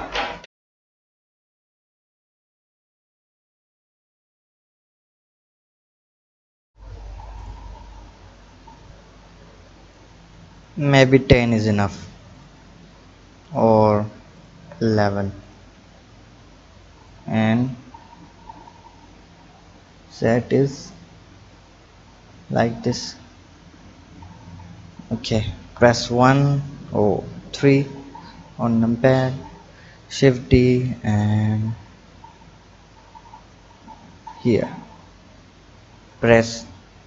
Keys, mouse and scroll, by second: 2.2-3.5 drag, 8.3 click, 10.5 click, 10.9-12.4 drag, 14.4 click, 14.8 KP_1, 16.0 KP_7, 17.1-20.1 drag, 22.1 click, 25.6 KP_1, 27.2 KP_3, 28.0-29.1 scroll up 5, 29.1 scroll up 1, 29.2 shift+d, 35.4 click, 36.3-36.9 scroll down 3.